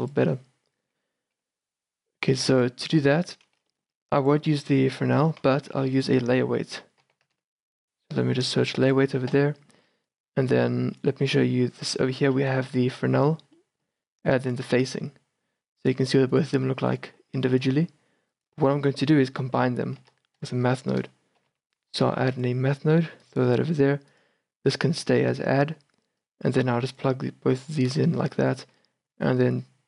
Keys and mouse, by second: 1.5 n, 3.2 n, 5.5 x, 6.0 shift+a, 9.9-11.8 drag, 12.2-13.7 drag, 14.7-20.1 drag, 20.1 shift+a, 24.3-29.8 drag.